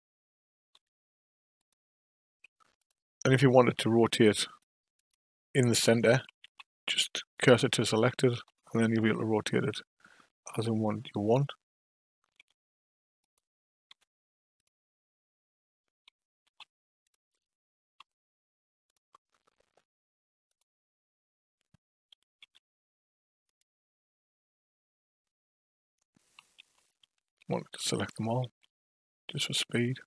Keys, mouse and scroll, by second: 0.7 r, 2.8 click, 3.9 click, 4.4 click, 4.9 click, 6.4 shift+s, 8.4 r, 9.5 click, 11.2 click, 12.4 g, 13.3 drag, 13.9 r, 16.4 shift+s, 18.0 r, 20.5 click, 22.4 shift+d, 26.6 ctrl+z, 27.4 a, 28.4 shift+d.